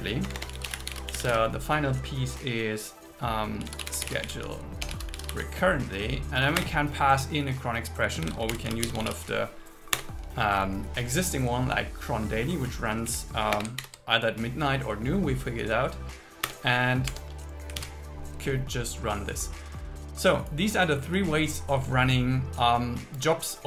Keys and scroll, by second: 0.3 Return, 1.2 Return, 4.9 BackSpace, 6.6 Return, 8.3 shift+c, 10.0 Return, 12.5 Right, 13.3 Left, 13.6 space, 13.8 alt+8, 16.5 Return, 17.3 Tab, 17.8 super+s.